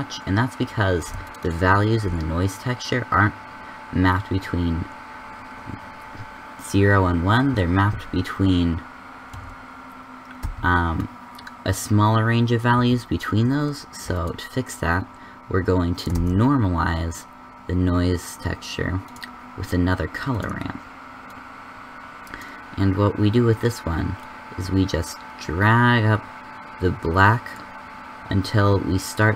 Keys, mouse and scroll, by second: 17.5 shift+a.